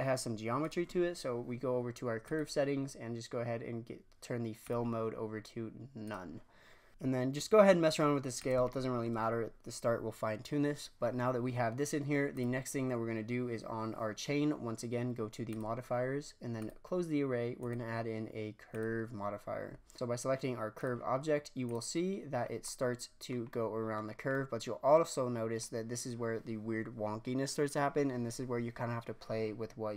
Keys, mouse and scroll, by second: 2.2 click, 4.6-6.9 drag, 6.9 s, 8.6-9.5 shift+scroll down 3, 12.3 click, 15.5-17.6 drag, 18.8-19.9 drag, 20.7 click, 22.4 scroll down 1, 22.6-23.5 middle drag, 23.5 scroll down 1, 23.6-24.0 middle drag, 24.0 scroll up 1, 24.3-25.6 middle drag, 25.6-28.6 scroll down 1, 29.5-29.9 scroll up 3.